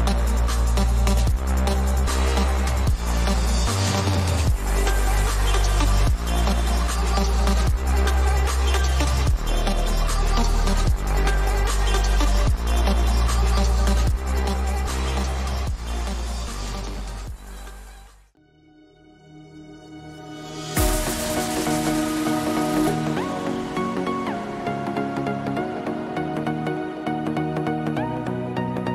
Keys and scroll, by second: 17.5 ctrl+=, 20.6 ].